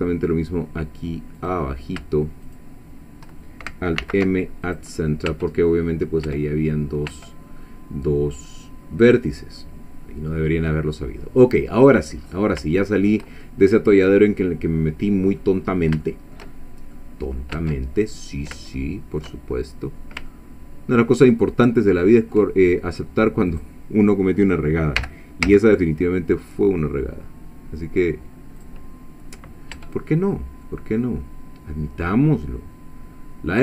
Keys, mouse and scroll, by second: 1.4 click, 2.5 shift+click, 4.0 alt+m, 4.7 alt+click, 5.3 Tab, 5.6-6.1 scroll down 1, 6.3 Tab, 7.1 Tab, 9.1 click, 9.6 middle click, 10.9 scroll down 2, 11.3 middle click, 12.2-12.6 scroll up 2, 12.8-15.6 shift+middle drag, 15.7 scroll up 2, 16.0-17.1 shift+middle drag, 17.6 Tab, 18.1-18.6 scroll up 1, 18.8 shift+middle click, 19.5 shift+scroll up 1, 20.3-22.5 ctrl+middle drag, 23.5 click, 25.0 g, 25.5 z, 28.6 click, 28.9-29.3 scroll down 2, 29.8 Tab, 30.2 scroll down 2, 30.7-33.6 middle drag.